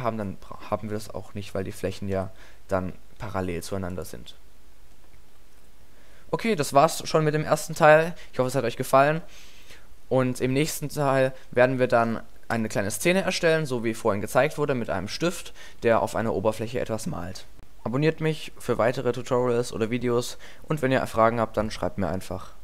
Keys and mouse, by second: 1.7 KP_7, 2.1 KP_5, 2.9-4.2 middle drag, 12.6 KP_0.